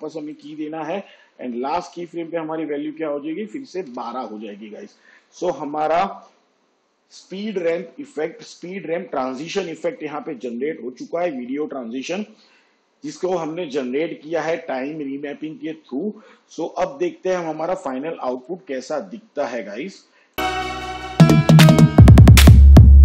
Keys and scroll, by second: 1.7 k, 3.7-4.6 typing.